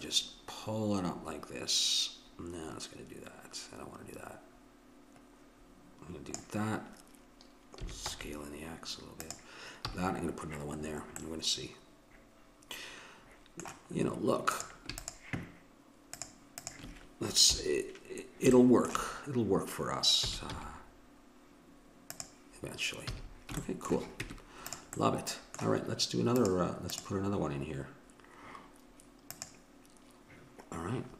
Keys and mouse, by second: 7.8 s, 9.9 a, 14.8-17.7 drag, 17.4 KP_7, 20.3 s, 23.0 a, 24.2 Tab, 26.4-28.8 drag, 29.3-31.1 drag.